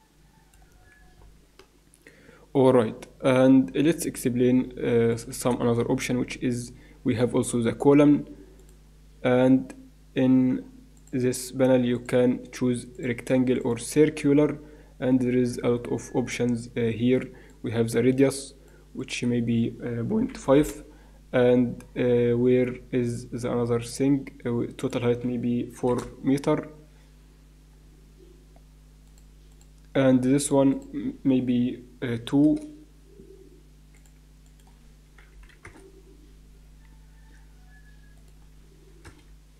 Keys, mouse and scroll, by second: 0.8-3.8 middle drag, 5.1 click, 5.8 shift+a, 10.9-12.8 drag, 12.9-14.7 drag, 17.5-20.8 drag, 25.1-26.5 drag, 27.7-29.0 middle drag, 29.0-32.4 drag, 33.9-36.1 drag, 38.1-39.5 drag.